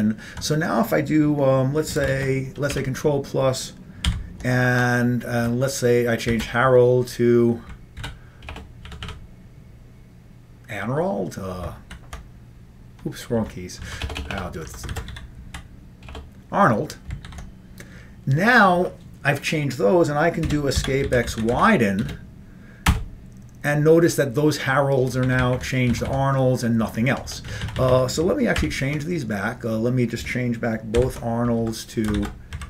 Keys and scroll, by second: 0.5 Right, 3.1 ctrl+shift+space, 3.1 ctrl+=, 4.5 ctrl+;, 6.4 typing, 8.0-8.8 typing, 9.0 Delete, 9.1 Delete, 11.9 ctrl+t, 13.4 Left, 13.9 Right, 14.1-16.2 typing, 17.3 ctrl+g, 20.5 Escape, 21.3-22.1 typing, 23.0 Return, 25.1 Up, 25.3 Up, 25.5 Up, 25.6 Up, 26.0 Down, 26.1 Down, 26.9 Right, 27.3 End, 27.5 Left, 27.7 Left, 27.8 Left, 28.0 Left, 28.6 ctrl+=, 31.1 ctrl+;, 32.2-32.6 typing.